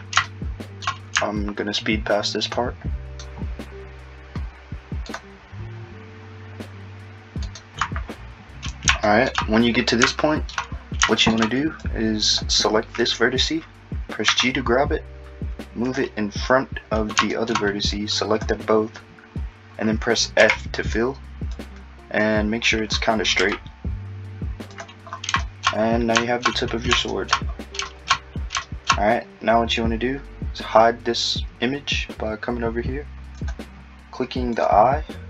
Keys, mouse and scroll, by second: 0.3 shift+middle click, 2.5 ctrl+right click, 5.1 ctrl+right click, 7.5 ctrl+right click, 8.7-9.1 scroll up 3, 9.1 shift+middle click, 9.6-10.1 scroll up 3, 10.1 shift+middle click, 10.7-11.1 scroll up 4, 11.1 shift+middle click, 11.8 click, 14.3 g, 17.9 click, 20.4 f, 21.6 click, 23.4 g, 34.5 click.